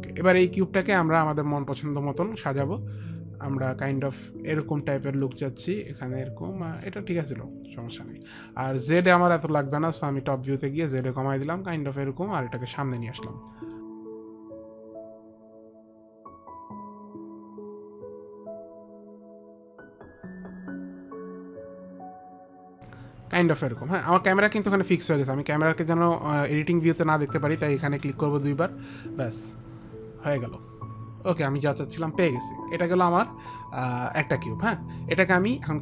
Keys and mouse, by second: 1.2 middle click, 3.5 click, 5.5 click, 6.0 click, 8.5 middle click, 10.5 click, 10.5 middle click, 12.9 click, 15.1 click, 19.5 click, 20.7 middle click, 20.7 click, 21.2 middle click, 22.2 alt+click, 27.8 click, 28.2 click, 29.9 alt+click.